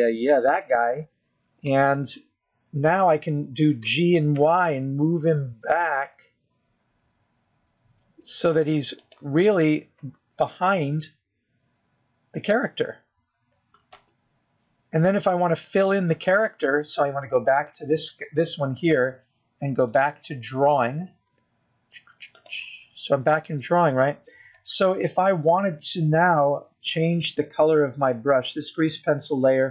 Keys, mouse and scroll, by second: 1.1 click, 1.7 middle click, 4.1 KP_0, 5.0 scroll up 1, 6.2 g, 11.8 middle click, 15.2 scroll up 3, 16.3 KP_0, 17.1-17.7 scroll up 1, 17.7-18.3 scroll up 1, 20.0 click, 22.3 click, 25.8 click.